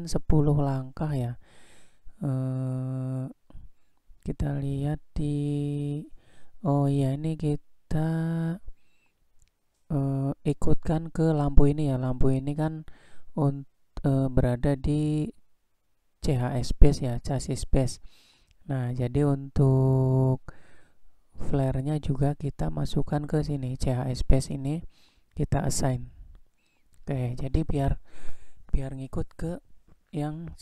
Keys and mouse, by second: 5.2 drag, 23.0 click.